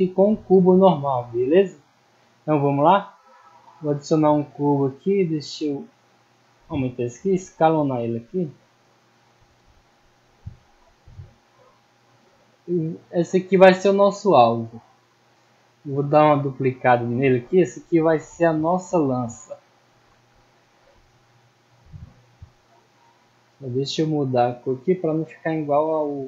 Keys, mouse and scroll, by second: 0.0-0.4 scroll up 2, 0.4 middle drag, 0.7 scroll down 2, 1.1 middle drag, 2.2 click, 3.7 click, 6.5 click, 8.9 click, 9.2-9.5 middle drag, 10.4-11.4 drag, 11.7-12.1 middle drag, 13.1 scroll down 1, 13.5 middle click, 14.4-15.2 drag, 17.0 click, 18.8 click, 19.7 click, 21.3 click, 22.2 click, 23.6 click, 24.6 click, 25.7 click.